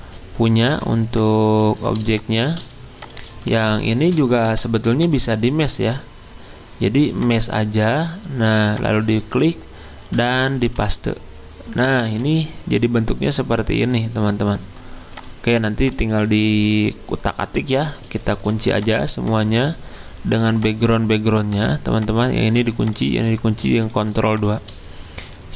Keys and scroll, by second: 3.9 ctrl+alt+2, 10.6 ctrl+f, 18.3 ctrl+2, 23.9 ctrl+2.